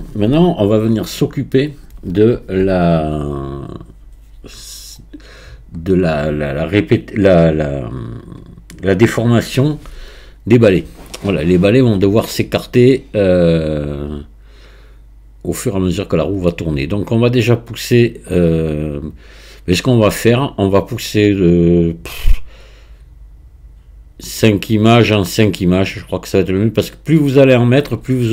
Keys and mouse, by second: 22.6-26.8 drag.